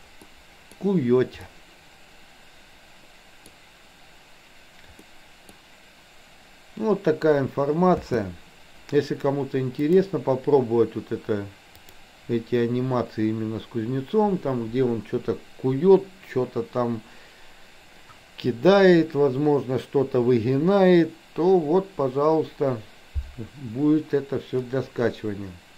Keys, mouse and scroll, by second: 0.3 middle click, 1.4-3.6 middle drag, 5.1 middle click, 8.1 space, 9.8-10.8 drag, 11.8-25.2 drag.